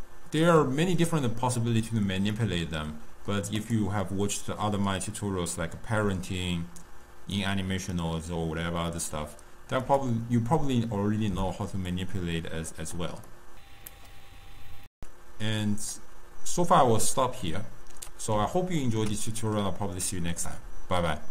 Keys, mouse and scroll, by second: 0.6-2.3 scroll up 2, 2.3-3.6 middle drag, 3.6 click, 9.8 click, 11.9 click, 13.2-14.8 middle drag, 15.8-17.0 drag, 17.0-21.3 middle drag.